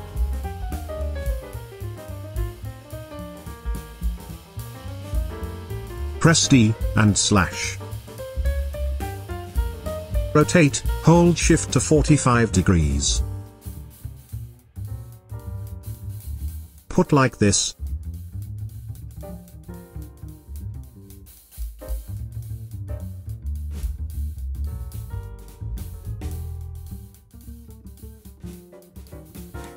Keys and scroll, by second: 0.1 Tab, 0.5 5, 6.4 d, 7.4 /, 9.1 v.